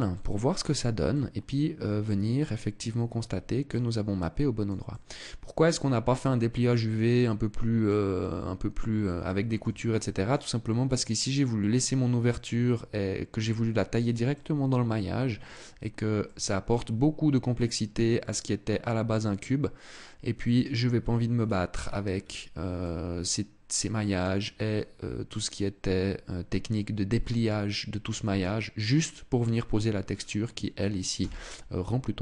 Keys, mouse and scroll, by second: 0.8 middle click, 2.0 middle click, 3.6 middle click, 4.6 middle click, 6.8 middle click, 7.8-8.4 scroll up 3, 8.9 shift+middle click, 9.6 middle click, 10.0 scroll down 1, 11.9 middle click, 14.0 middle click, 15.9 middle click, 18.0 middle click, 20.6-21.8 scroll down 11, 21.8-22.4 scroll up 4, 22.4 middle click, 24.1-24.5 scroll up 3, 25.1 scroll up 1, 26.4 middle click, 29.8-30.8 scroll down 2, 30.8 scroll down 1, 30.8 KP_0.